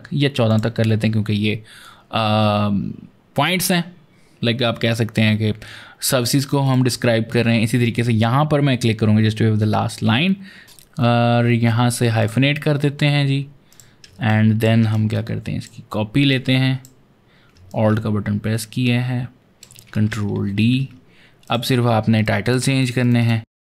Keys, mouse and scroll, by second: 0.3 click, 6.5 click, 10.5 click, 12.0 click, 13.5 click, 14.0 ctrl+space, 14.1 ctrl+click, 14.5 ctrl+space, 14.8 click, 16.1 click, 17.6 alt+click, 20.2 ctrl+d, 20.5 ctrl+d, 21.3 click, 22.9 double click, 23.1 click.